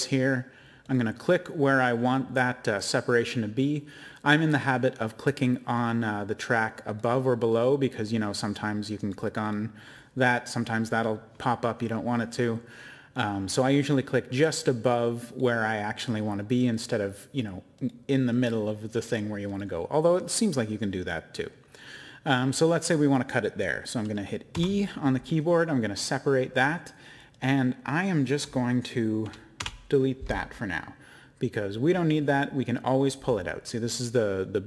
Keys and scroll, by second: 24.5 e, 29.6 BackSpace.